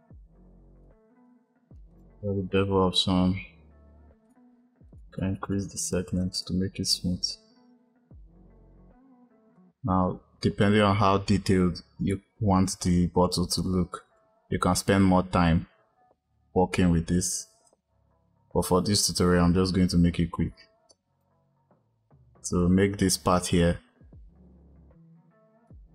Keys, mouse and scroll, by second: 1.8-9.2 drag, 9.3 click, 9.4-12.4 drag, 12.7 click, 14.0-17.0 drag, 17.5 click, 25.5 click.